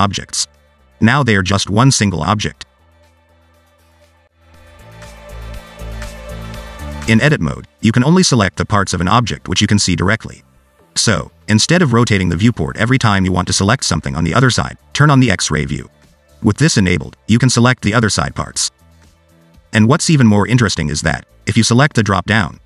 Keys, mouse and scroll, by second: 1.2 Tab, 2.3 click, 2.8 a, 3.2 g, 7.9 click, 9.5 middle click, 11.2 shift+click, 12.0 shift+click, 12.5 scroll down 2, 12.6 middle click, 13.8-14.2 scroll up 2, 14.2 click, 16.0 click, 18.3 click, 19.3 middle click, 21.0 shift+middle click, 21.3 click, 22.2 click.